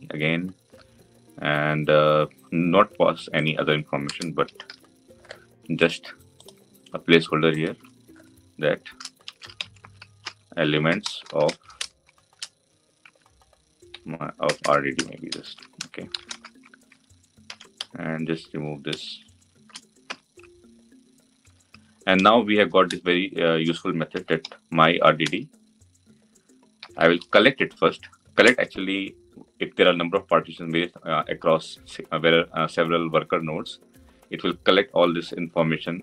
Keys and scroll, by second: 20.0 Delete, 22.7 Delete, 25.1 Return.